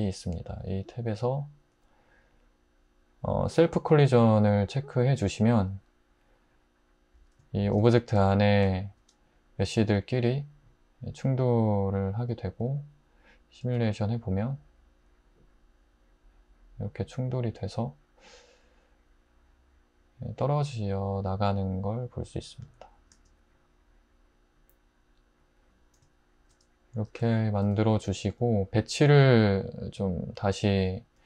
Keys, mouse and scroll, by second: 13.6 space, 23.1 space.